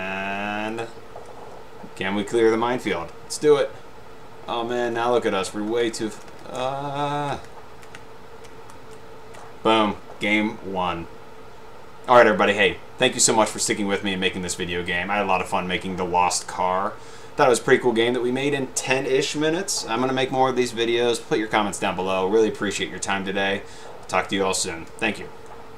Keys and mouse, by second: 0.9 click, 3.5 Up, 4.8 Right, 5.8 Left, 6.0 Right, 6.4 Right, 6.7 Left, 7.6 Right, 8.1 Left, 9.0 Right.